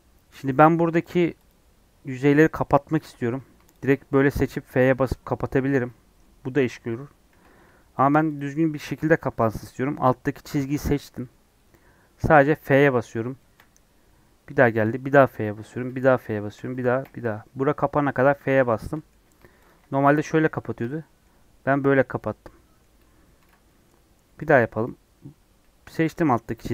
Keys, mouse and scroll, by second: 1.0 click, 1.5 click, 3.7 alt+click, 4.3 f, 5.1-7.3 middle drag, 7.3 ctrl+z, 8.0 click, 8.3 click, 10.6 click, 10.9 click, 12.1 f, 13.3 shift+middle click, 14.1-14.5 scroll up 1, 14.7 shift+middle click, 15.1 f, 15.8 f, 17.0 f, 18.0 scroll down 1, 18.3-19.6 middle drag, 19.6 alt+click, 20.0 f, 20.6-23.4 shift+middle drag, 23.4 ctrl+z, 23.6 middle click, 24.4 click, 26.1 click, 26.6 middle click.